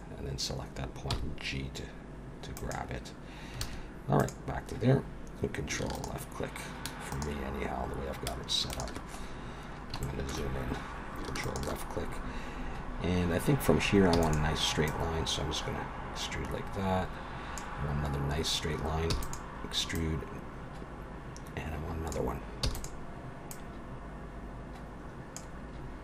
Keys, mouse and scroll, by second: 1.1 g, 4.2 click, 5.9 ctrl+right click, 7.2 ctrl+right click, 8.7 ctrl+right click, 9.2-10.0 scroll up 5, 10.0 shift+middle click, 11.4 ctrl+right click, 14.1 e, 14.9 click, 19.1 e, 19.9 click, 22.6 e, 23.5 click, 25.7-26.0 scroll down 5.